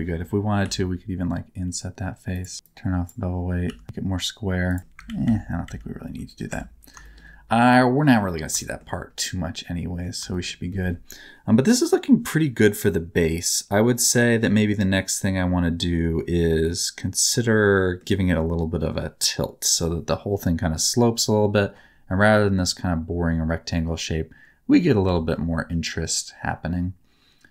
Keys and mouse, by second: 0.6 i, 2.6 click, 3.6 s, 3.8 z, 4.6 click, 5.0 ctrl+z, 5.2 ctrl+z, 5.6 ctrl+z, 6.4 Tab, 7.0 shift+middle click, 7.6 middle click, 8.1 middle click, 8.5 shift+middle click, 9.1 middle click, 10.2 shift+middle click, 10.6-17.9 middle drag, 20.7-24.8 middle drag, 25.0 Tab, 25.2 middle click, 26.0-27.5 middle drag.